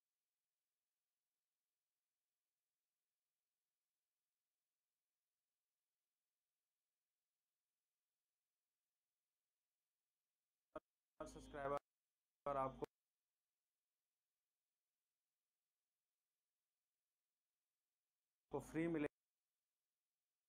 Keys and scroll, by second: 6.1 c, 9.3 v, 11.5 space, 16.2 g, 17.9 5, 18.2 Return, 18.9 space.